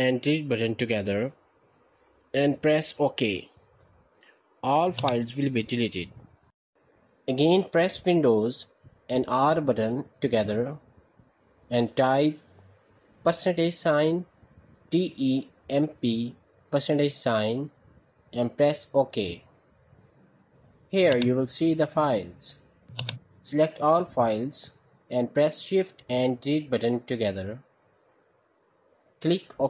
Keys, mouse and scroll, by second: 4.8-5.8 drag, 9.0 super+r, 10.5 BackSpace, 13.3 typing, 14.9-16.6 typing, 17.9 typing, 20.9 click, 22.8 click, 25.2 ctrl+a, 27.0 Delete, 27.6 Return.